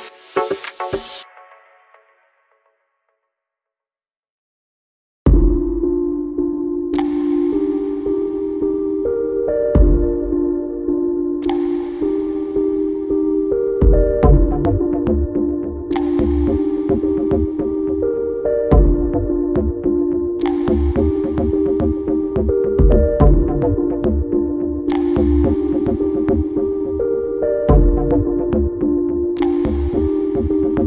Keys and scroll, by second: 18.9 ctrl+j, 30.7 Right.